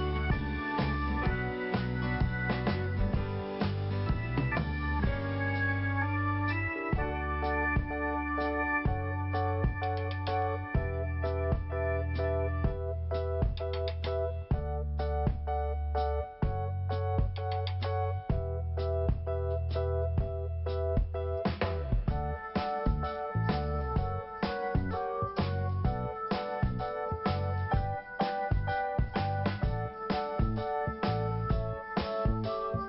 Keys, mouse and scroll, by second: 1.7 t, 2.8 scroll up 1, 3.8 click, 5.7 click, 7.4 scroll up 2, 8.4 click, 8.5 click, 10.7 click, 10.9 click, 11.0 click, 11.6 click, 11.7 click, 12.7 click, 12.8 click, 13.3 click, 13.3 click, 15.0 click, 15.1 click, 19.2 right click, 20.7 click, 22.2 click, 22.3 click, 22.5 click, 22.6 click, 23.7 click, 26.6-27.5 scroll down 1, 31.3 click, 31.7 scroll down 1.